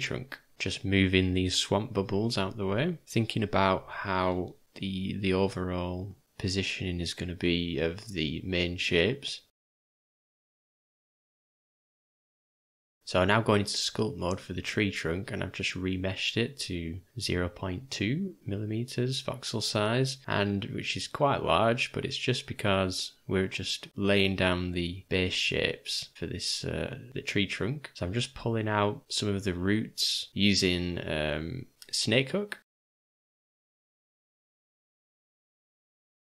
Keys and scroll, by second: 3.0 r, 4.9 g, 7.4 g, 9.9 d, 10.9 v, 12.8-13.9 typing, 19.2 ], 23.9 v, 24.9 v, 26.3 [, 26.4 [, 27.1 [, 27.2 [, 30.2 [, 30.3 [, 31.7 ], 32.0 [, 32.1 [.